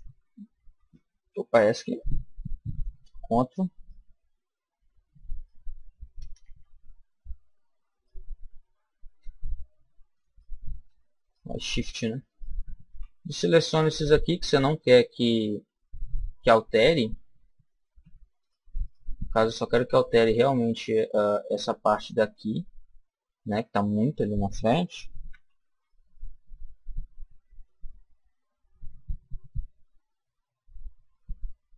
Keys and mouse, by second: 2.0 middle click, 3.7-7.3 ctrl+right drag, 6.4 ctrl+z, 7.0 ctrl+z, 7.9-9.7 right drag, 8.7 ctrl+z, 10.2-14.1 right drag, 18.4-21.4 right drag, 25.3 s.